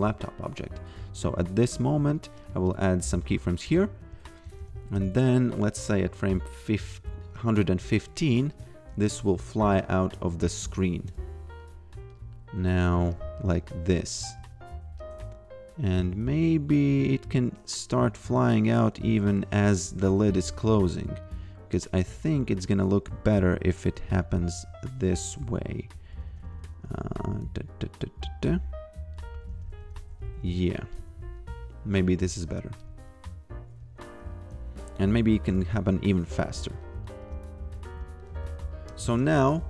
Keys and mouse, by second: 1.0 a, 2.1 click, 3.6 f, 4.4 g, 7.9 click, 9.2 shift+click, 11.5 click, 13.6 f, 15.0 click, 19.6 a, 20.5 g, 21.7 click, 23.9 g, 25.9 a, 26.8 g, 27.7 click, 29.1 a, 29.5 g, 30.8 click, 32.8 f, 34.8 click, 37.2 f, 39.0 shift+c.